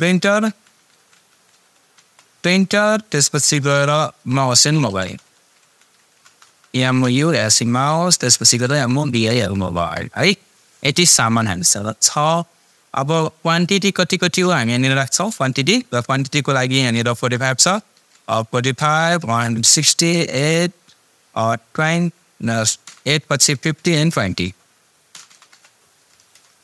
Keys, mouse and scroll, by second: 0.2-2.0 typing, 4.6-10.0 typing, 14.4 click, 22.8 BackSpace, 25.1 BackSpace, 25.5 Return.